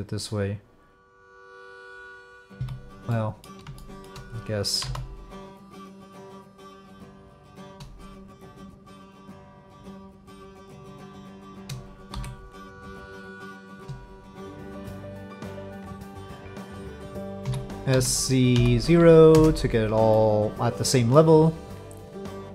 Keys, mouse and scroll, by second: 1.5 click, 2.5 f, 3.1 click, 3.8 shift+click, 4.8 e, 6.4 click, 7.5 shift+click, 9.6 click, 12.1 j, 12.7 click, 13.4 click, 14.5-16.0 shift+drag, 16.5 click, 17.4 s, 20.2 click.